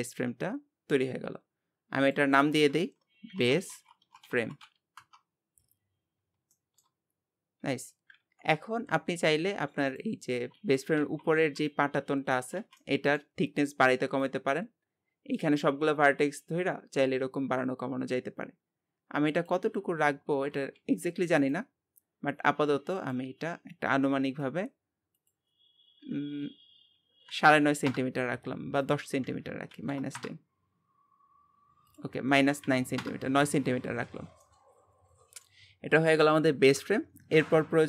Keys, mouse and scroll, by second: 2.0-6.2 drag, 6.2 scroll down 1, 6.5-7.7 shift+middle drag, 7.7 Tab, 8.2 KP_1, 10.0 click, 10.3 scroll up 2, 10.6 alt+z, 11.0 alt+a, 11.4 b, 12.6 alt+z, 12.8-14.2 middle drag, 14.2-17.2 drag, 22.5-34.1 drag, 34.1 Tab, 34.4-35.8 middle drag, 35.8-37.7 scroll down 1, 37.7 scroll down 1.